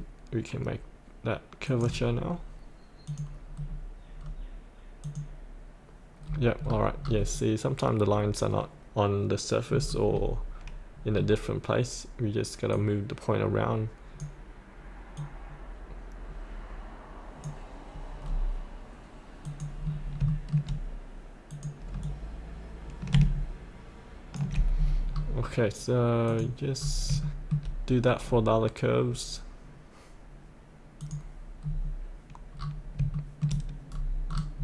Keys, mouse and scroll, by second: 1.6 click, 3.5-4.7 scroll down 1, 5.0 click, 6.2-9.7 scroll up 1, 9.7 scroll down 1, 12.7-18.0 drag, 18.2-18.7 scroll down 1, 19.4 click, 19.8-20.2 scroll up 1, 20.2 shift+middle click, 21.4-24.7 drag, 24.7 scroll up 1, 26.2 click, 26.8 scroll up 1, 27.2 shift+middle click, 31.0 click, 31.6-32.5 scroll down 1, 32.5 scroll up 1, 33.1 shift+middle click, 33.9 scroll up 1, 34.2-34.6 scroll down 1.